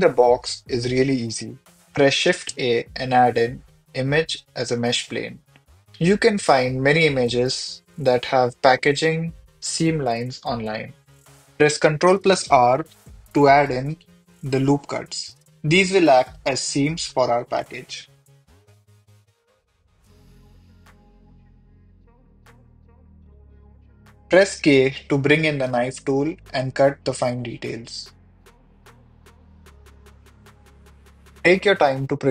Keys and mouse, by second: 1.4 shift+a, 7.0 s, 8.3 click, 9.4 ctrl+r, 10.7 Tab, 11.1 ctrl+r, 11.7 click, 14.3 click, 15.3 ctrl+r, 15.7 click, 16.9 click, 17.6 ctrl+r, 18.4 click, 19.4 ctrl+r, 19.8 ctrl+r, 20.3 click, 20.6 ctrl+r, 20.7 click, 21.3 ctrl+r, 21.4 click, 22.4 ctrl+r, 22.6 click, 22.6 ctrl+r, 22.9 ctrl+r, 23.1 click, 23.9 click, 23.9 ctrl+r, 24.0 click, 24.9 j, 26.3 k, 27.4 click, 28.4 click, 29.3 click, 29.8 Return, 31.5 k, 31.9 click.